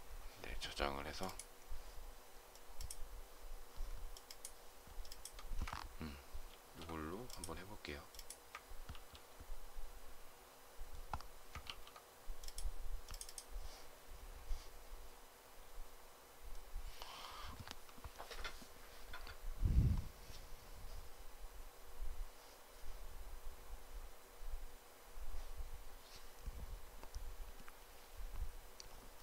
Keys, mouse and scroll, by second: 6.4 ctrl+x, 8.8 ctrl+c, 11.6 ctrl+v.